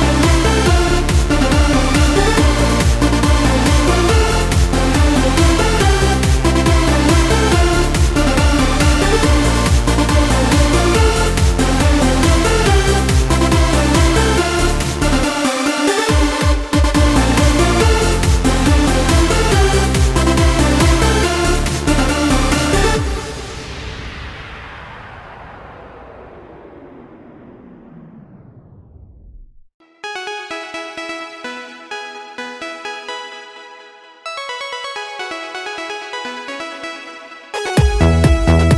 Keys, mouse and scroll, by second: 0.7 Tab, 1.4 middle click, 2.4-3.6 drag, 3.6 middle click, 4.4-5.2 scroll down 1, 5.8 click, 6.9-7.6 scroll down 1, 7.3-8.5 drag, 9.0 middle click, 9.9-11.2 scroll down 1, 11.2 click, 11.2 scroll down 1, 11.6-13.0 scroll up 1, 13.0 click, 13.0 middle click, 14.7-16.2 drag, 16.9-18.3 drag, 19.0 middle click, 19.7 click, 20.3 middle click, 22.0-22.8 scroll down 1, 23.0-25.0 drag, 25.5 middle click, 27.3 click, 27.8-29.3 middle drag, 29.3 right click, 30.7 click, 31.7 click, 34.0-36.8 middle drag, 36.8-38.2 drag.